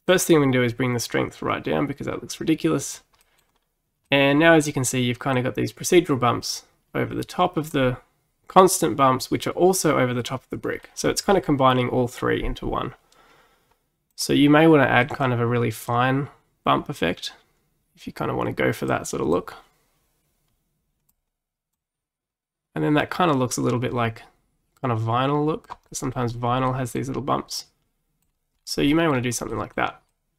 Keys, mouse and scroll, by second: 0.1-3.1 drag, 3.2 middle click, 3.5-4.1 scroll up 2, 4.1-5.4 middle drag, 5.4-8.4 drag, 10.9-13.9 middle drag, 14.1 click, 15.1 middle click, 15.9-18.9 drag, 19.4-24.8 drag, 25.9 middle click, 26.2-26.7 scroll up 3, 26.7-28.3 middle drag, 28.3-28.9 scroll down 4, 28.9-30.3 middle drag.